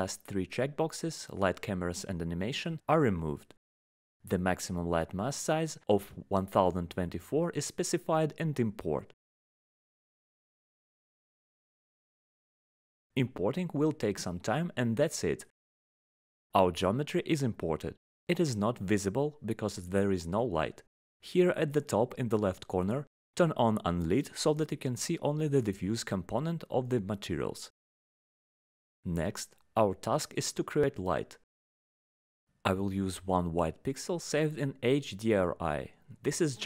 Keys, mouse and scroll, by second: 1.1 click, 1.4 click, 1.9 click, 2.3 click, 3.5 click, 4.4 click, 6.2 click, 9.0 click, 16.1 click, 17.4 click, 19.0 right click, 20.9 click, 21.8 click, 29.7 right click, 30.6 click, 33.8 click, 35.3 click, 35.5 click.